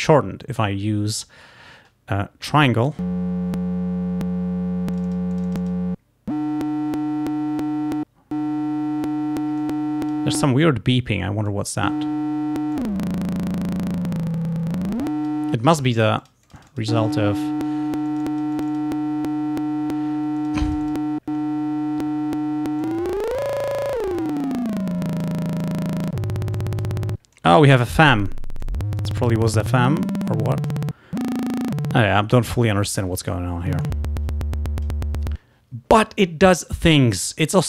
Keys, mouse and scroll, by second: 5.0 click, 9.7 click, 11.5 click, 12.8-15.5 drag, 16.3 click, 18.1 click, 20.4 click, 22.9-25.5 drag, 25.7 click, 26.6 click, 27.4 click, 28.7 click, 29.8-30.9 drag, 33.9-35.1 drag.